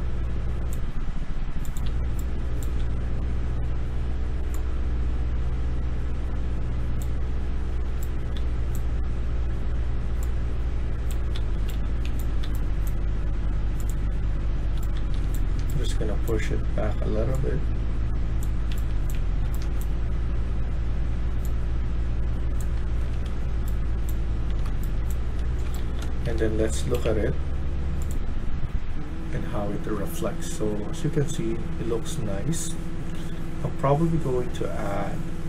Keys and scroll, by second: 1.7-2.6 d, 2.7 w, 7.8-8.2 typing, 11.0-12.9 typing, 14.6-15.5 typing, 18.7-20.0 typing, 22.7-26.4 typing.